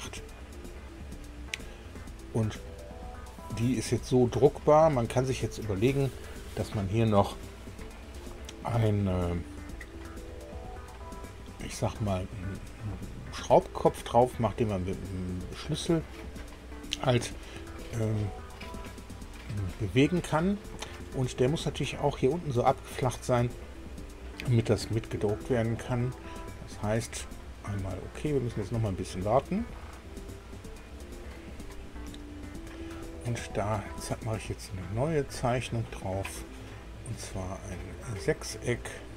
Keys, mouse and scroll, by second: 0.9-3.2 middle drag, 3.3 scroll down 1, 3.8 middle click, 14.2 click, 15.5 scroll up 1, 16.2 middle click, 28.1 click, 34.9 click, 38.0 click.